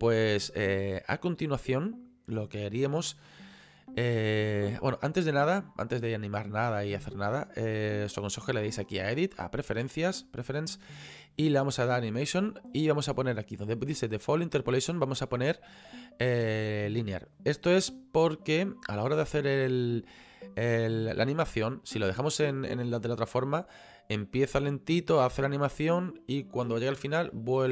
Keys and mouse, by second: 5.6 click, 10.0 click, 11.8 click, 15.0 click, 17.3 click.